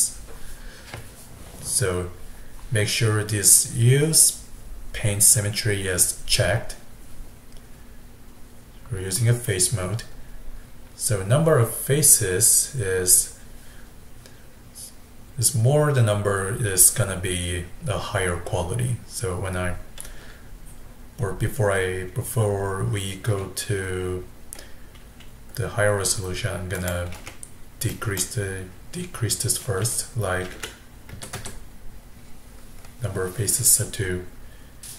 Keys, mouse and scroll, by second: 31.4 KP_0.